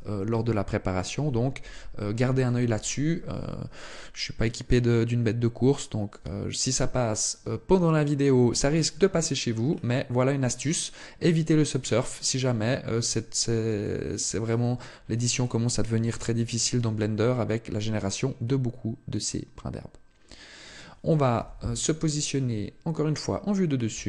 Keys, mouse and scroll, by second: 5.9 Tab, 6.3-7.4 scroll down 1, 7.5 shift+middle click, 8.2 middle click, 8.8 scroll down 1, 10.9 right click, 11.3 right click, 11.6 right click, 12.0 right click, 12.7 right click, 13.5 shift+middle click, 14.1 scroll down 1, 16.1 shift+middle click, 17.0 middle click, 21.1 KP_7, 22.2 shift+middle click, 23.6 shift+a.